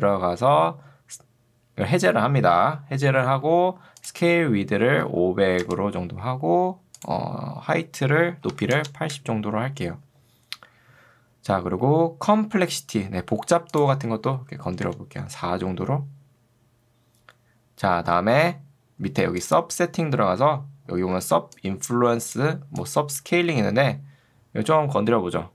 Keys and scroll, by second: 5.0 0, 5.6 Return, 8.6 0, 8.8 Return, 14.8 Return.